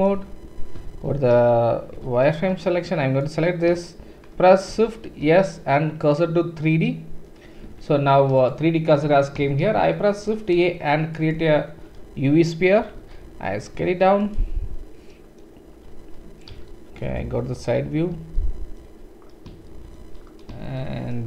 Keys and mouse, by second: 0.9 shift+z, 1.9 click, 1.9 1, 2.3 click, 4.9 shift+s, 5.0-6.6 shift+drag, 5.0-6.6 shift+middle drag, 5.0-6.6 shift+right drag, 7.7 Tab, 8.5-12.5 drag, 9.6 shift+a, 12.5-13.0 right drag, 13.0 s, 13.1 right click, 13.4 right click, 13.5-18.3 drag, 16.5 KP_1, 18.3-20.6 shift+middle drag, 18.3-20.6 shift+right drag, 20.6-21.1 shift+drag.